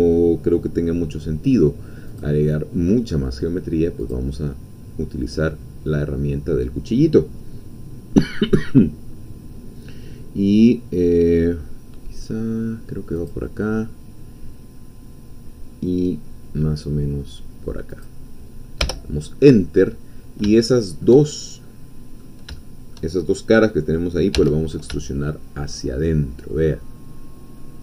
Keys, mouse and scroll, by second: 2.1 click, 4.0 click, 13.2 click, 17.9 click, 18.9 Return, 19.5-21.2 middle drag, 21.6 click, 22.6 shift+click, 24.4 e.